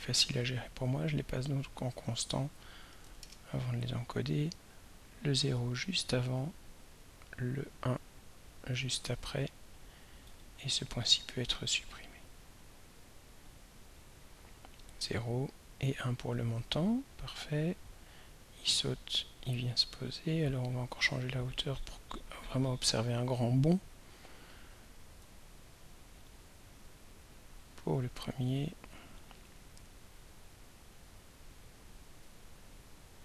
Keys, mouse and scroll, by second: 1.9 click, 3.0 0, 3.2 Return, 5.1-6.7 drag, 7.4-9.3 drag, 10.3 right click, 12.3 click, 13.5-21.9 drag, 24.9-27.0 drag, 30.1-31.3 drag.